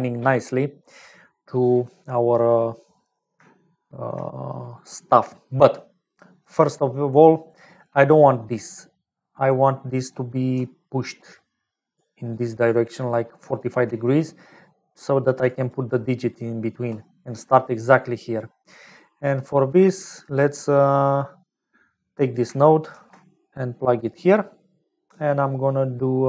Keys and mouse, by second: 3.5 shift+middle click, 6.2 middle click, 10.5-13.8 typing, 11.5 click, 12.3 click, 13.1 middle click, 14.9-16.8 typing, 15.2 click, 15.6 click, 16.3 middle click, 18.7 middle click, 21.5 middle click, 22.3 click, 22.9 shift+d.